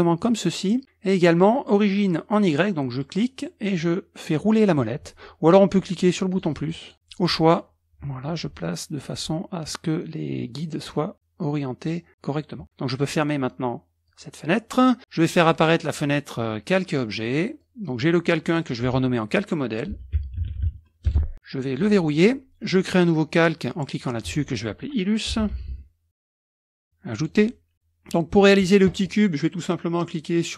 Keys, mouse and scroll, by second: 3.0 click, 3.7-4.3 scroll up 1, 4.3-5.9 scroll up 1, 6.1 click, 6.5 click, 6.9-9.1 scroll up 1, 9.1-9.5 scroll up 1, 14.1 middle click, 14.1-14.5 scroll up 1, 15.4 middle click, 15.4 scroll up 1, 15.7 click, 16.1 click, 17.6 click, 18.5 click, 19.7-21.2 typing, 21.8 click, 24.0 click, 25.1-26.8 typing, 27.2 click, 27.7 middle drag, 27.7 scroll up 1.